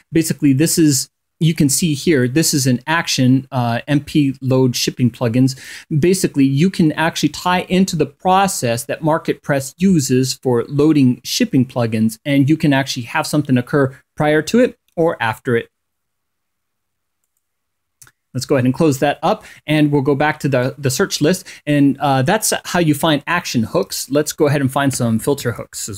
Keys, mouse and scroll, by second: 0.0 click, 1.8 click, 3.5-5.0 drag, 5.0-16.9 scroll up 3, 5.2 click, 16.9 click, 17.2-18.1 scroll up 1, 19.7 click, 24.2-25.9 typing.